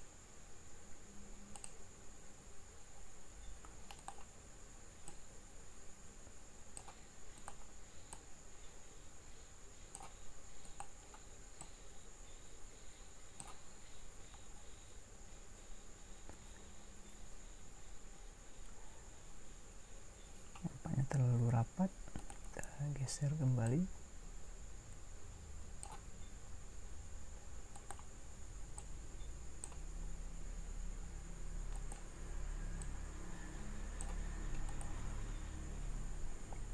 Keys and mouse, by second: 5.2-7.4 right drag, 8.2 right click, 17.7 middle click, 25.1 click, 27.7-28.7 right drag, 28.8 click.